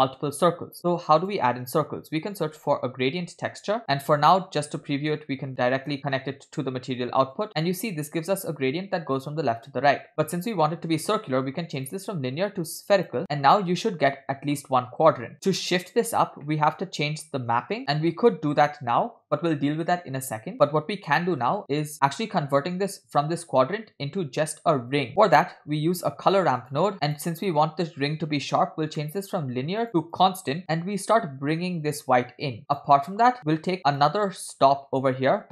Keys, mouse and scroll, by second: 0.8 shift+a, 6.0 alt+right click, 7.3-7.9 drag, 8.3 scroll down 1, 10.0 scroll up 2, 10.2 middle click, 11.8-13.2 drag, 13.5-13.9 scroll down 2, 16.5 middle click, 17.9 scroll up 4, 25.1 middle click, 25.1 scroll down 1, 25.9 shift+a, 26.9 click, 29.0 middle click, 29.3-29.8 scroll up 2, 29.9 click, 30.7-32.8 drag, 33.1-34.0 scroll up 4, 34.0 middle click, 34.3 scroll up 2.